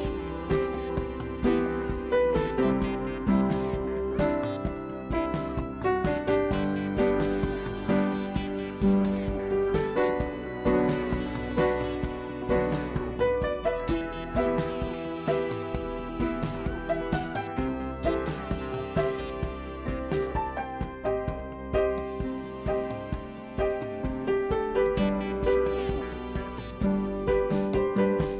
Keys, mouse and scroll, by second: 6.6 right click, 27.0 right click.